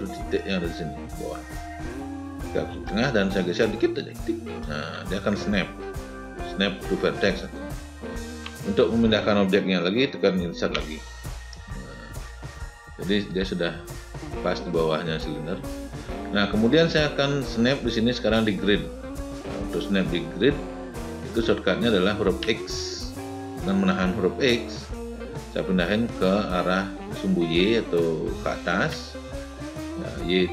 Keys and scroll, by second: 10.4 Insert, 22.2 x.